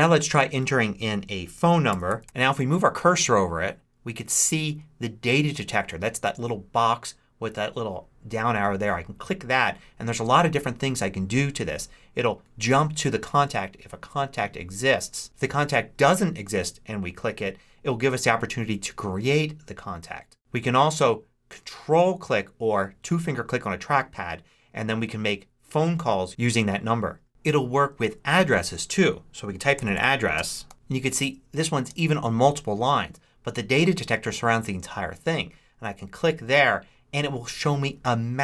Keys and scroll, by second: 1.6-2.6 typing, 29.2-31.2 typing, 31.8 Return.